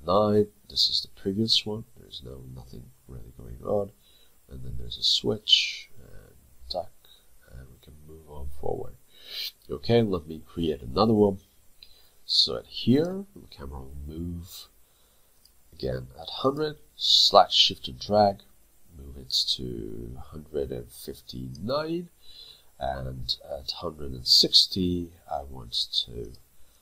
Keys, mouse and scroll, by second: 17.5 shift+click, 26.7 double click.